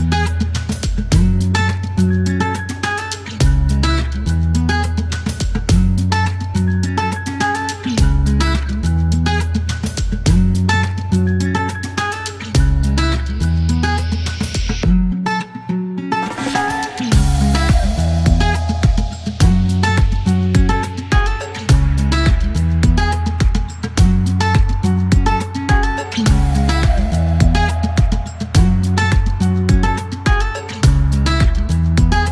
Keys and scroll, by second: 1.1 typing, 2.3 KP_1, 2.5 Return, 3.4 KP_1, 3.5 KP_3, 3.6 Return, 6.8 alt+q, 7.4-8.3 typing, 18.3-19.3 typing, 31.4 s.